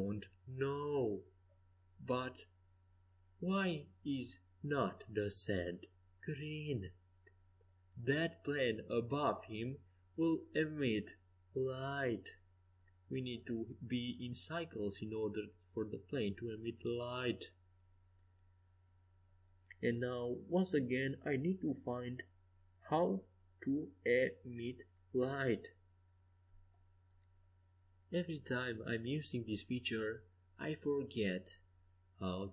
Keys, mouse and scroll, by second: 0.0 s, 0.1 middle click, 4.0 r, 6.8 s, 7.8-11.0 drag, 11.0-12.8 middle drag, 12.8-21.8 drag, 22.3-27.4 drag, 27.4-29.2 middle drag, 29.2-32.5 drag.